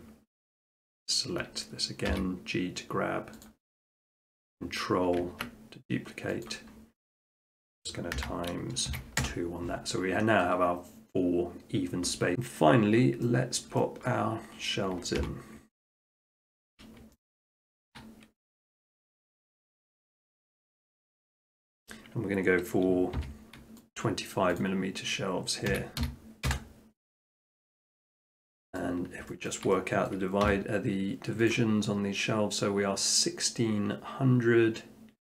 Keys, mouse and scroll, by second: 0.4 s, 0.9 click, 2.0 click, 2.1 g, 3.5-6.2 drag, 6.7-7.3 scroll, 7.6 shift+middle click, 8.2 scroll down 6, 8.2 x, 8.9 x, 9.2 Return, 12.2 middle click, 12.5 middle click, 12.6 middle click, 12.7 middle click, 12.9 middle click, 13.2 shift+middle click, 13.4 shift+middle click, 13.6 shift+middle click, 14.1 middle click, 14.5 middle click, 14.9 middle click, 15.2 scroll, 15.2 r, 16.8 middle click, 17.8 shift+middle click, 20.1 click, 21.5 click, 21.9 middle click, 22.0 middle click, 23.2 e, 24.0 click, 24.6 click, 25.7-26.0 typing, 26.5 Return, 26.9 KP_Enter, 26.9 middle click, 27.1 middle click, 27.3 Tab, 27.7 middle click, 28.3 shift+middle click, 28.4 shift+middle click, 28.8 middle click, 28.9 middle click, 29.0 middle click, 29.1 shift+middle click, 29.5 shift+middle click, 29.5 shift+middle click, 30.1 middle click, 30.1 scroll down 3, 30.5 scroll, 30.5 t, 31.5 click.